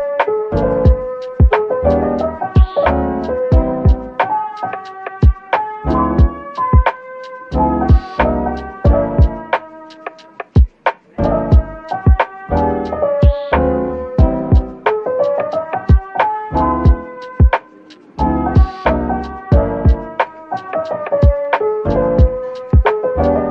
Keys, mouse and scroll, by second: 0.4 middle click, 1.2 typing, 6.3-7.2 typing, 10.7-11.0 typing, 14.0 middle click, 15.1 ctrl+s, 16.0 middle click, 17.1-17.6 scroll down 1, 17.6 middle click, 19.8-20.3 scroll up 1, 20.3 middle click, 22.1 Tab.